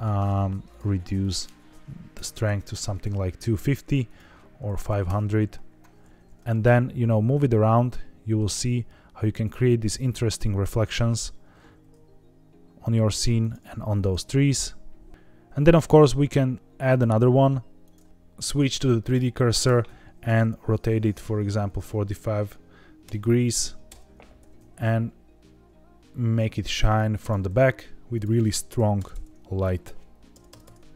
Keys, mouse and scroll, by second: 0.6 click, 1.1-2.8 drag, 4.0-5.0 drag, 4.8 KP_0, 6.1 g, 6.4 shift+z, 9.3 click, 11.6 g, 11.8 z, 13.3 click, 13.5 g, 13.9 shift+z, 15.1 Escape, 15.1 r, 15.1 x, 15.6 shift+a, 17.1-18.1 typing, 17.8 click, 18.1 Escape, 19.6 r, 19.8 x, 21.5 KP_4, 21.6 KP_5, 23.0 KP_Subtract, 23.8 KP_Enter, 24.3 r, 24.5 z, 27.1 click, 28.0-30.9 drag, 29.0 KP_0, 30.4 BackSpace, 30.6 BackSpace.